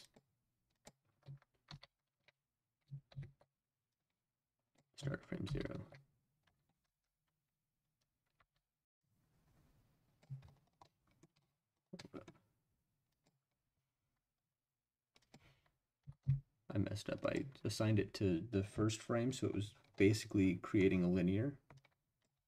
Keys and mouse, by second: 0.0 click, 0.7 click, 1.7 ctrl+v, 3.1 ctrl+z, 3.9-4.8 drag, 5.4 ctrl+v, 6.8 space, 8.4 space, 9.0-10.2 drag, 10.9 middle click, 12.0-12.3 middle drag, 13.1 click, 15.2 click, 16.0 g, 16.2 x, 17.2 click, 20.0 middle click, 21.7-22.2 drag, 22.3 space.